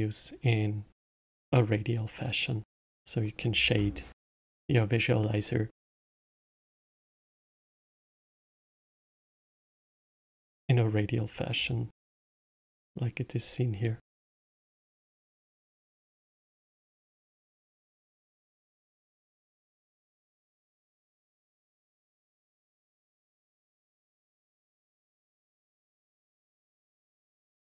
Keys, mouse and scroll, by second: 6.7-7.7 middle drag, 7.7 scroll down 2, 8.2-8.9 scroll up 4, 9.2-10.0 scroll down 2, 13.8-16.4 middle drag, 16.4 ctrl+shift+click, 17.1 click, 18.2 click, 19.5-21.7 middle drag, 21.7 click, 23.3-25.8 drag, 25.8-26.1 scroll up 1.